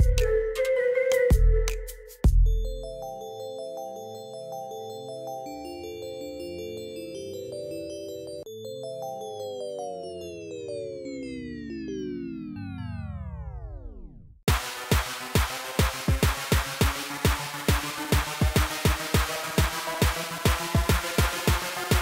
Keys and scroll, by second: 3.6 alt+a, 9.9 n, 10.1 e, 10.2 t, 10.7 Return, 15.6 Tab, 18.1 Tab, 19.0 alt+a.